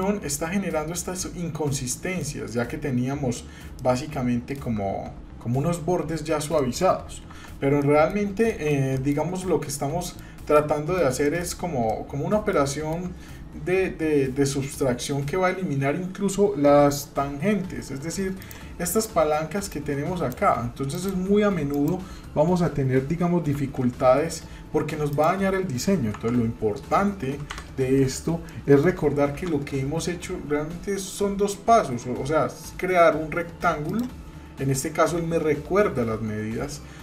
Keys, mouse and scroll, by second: 0.2-1.1 scroll up 2, 1.9 middle click, 2.5 scroll down 1, 3.3-3.8 scroll down 1, 3.8 middle click, 6.6 middle click, 7.3 Tab, 7.8 middle click, 8.1 scroll down 1, 8.5 shift+middle click, 9.7 middle click, 10.5 middle click, 11.3 shift+middle click, 11.9 middle click, 12.7 shift+middle click, 14.7 scroll up 1, 17.3 Tab, 18.4 click, 19.7 click, 20.9 click, 21.7 click, 23.5 s, 26.2 Tab, 27.6 Delete, 28.5-28.9 shift+middle drag, 29.3 shift+a.